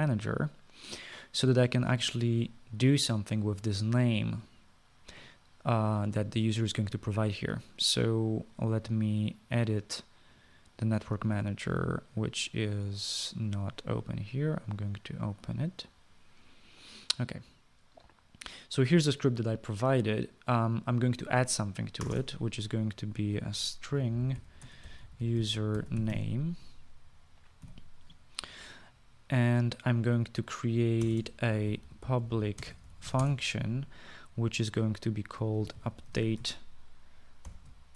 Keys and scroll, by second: 23.0 Return, 23.1 Return, 24.3-27.6 typing, 28.6 typing, 32.0 Return, 32.1 Return, 32.5-34.6 typing, 36.4-37.9 typing.